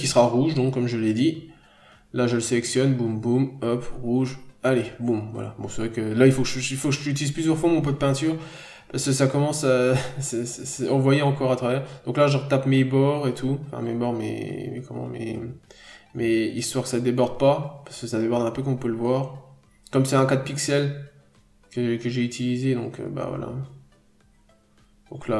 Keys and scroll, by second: 4.0 n, 6.5 ctrl+z, 7.9 ctrl+z, 9.5-9.9 scroll down 1, 10.0 n, 10.1-10.5 scroll up 1, 10.8 b, 11.7 n, 12.3 b, 14.0 ctrl+z, 15.2 p, 16.5 n, 18.3 n, 19.7 n, 21.4-21.7 scroll down 1, 21.5-22.5 typing.